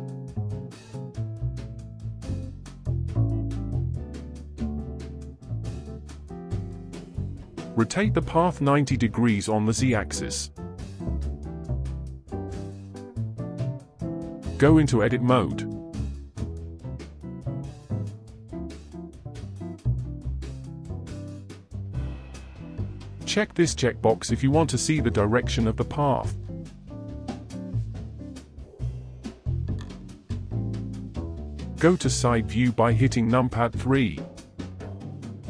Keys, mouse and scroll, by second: 0.0-3.7 shift+middle drag, 3.8-6.8 middle drag, 8.4 r, 11.9-14.1 middle drag, 15.1 a, 17.9-18.4 scroll down 2, 18.4-19.2 scroll up 3, 19.2-20.7 scroll down 4, 21.0-24.1 drag, 26.7 scroll up 3, 27.5-28.8 shift+middle drag, 28.8 click, 30.1-31.2 middle drag, 31.2 KP_1, 31.3-34.3 shift+middle drag, 34.3 KP_1.